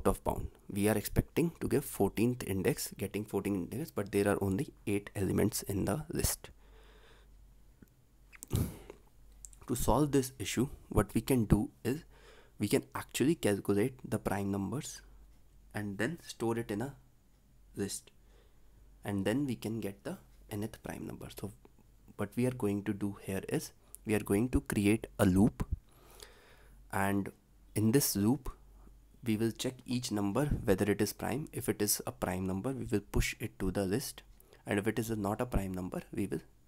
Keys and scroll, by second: 35.7 ctrl+s.